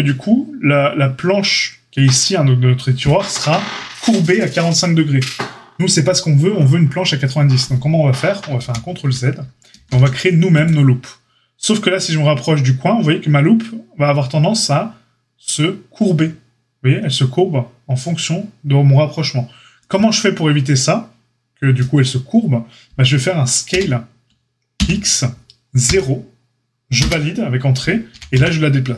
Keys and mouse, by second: 8.6 ctrl+z, 9.7 ctrl+r, 28.1 g.